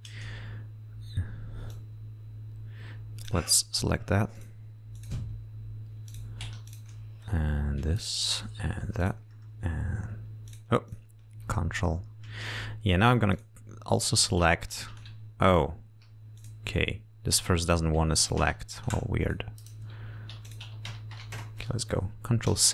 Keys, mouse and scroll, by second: 0.1 r, 0.3-1.1 scroll up 2, 2.0-3.8 drag, 4.7 ctrl+click, 5.3 ctrl+click, 5.9 ctrl+scroll down 3, 6.4 ctrl+click, 7.0 ctrl+click, 7.5 ctrl+scroll down 3, 8.3 ctrl+click, 9.3 ctrl+click, 9.7 ctrl+scroll down 2, 10.8 ctrl+click, 11.2 ctrl+click, 12.3 scroll down 2, 12.7 scroll up 2, 13.6 ctrl+click, 14.6 ctrl+click, 15.8 ctrl+click, 16.7 ctrl+click, 17.9 ctrl+click, 18.5 ctrl+click, 19.6 ctrl+click, 20.1 ctrl+scroll down 2, 20.8 ctrl+click.